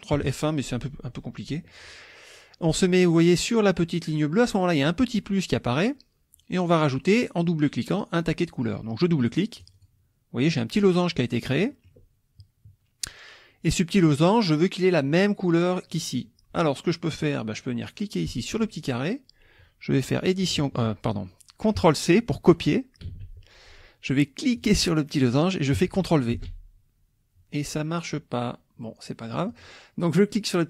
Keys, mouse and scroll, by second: 9.6 click, 11.5 click, 11.7 middle click, 11.7-12.0 scroll up 1, 18.5 click, 23.1 ctrl+c, 24.6 click, 26.3 ctrl+v, 29.5 click.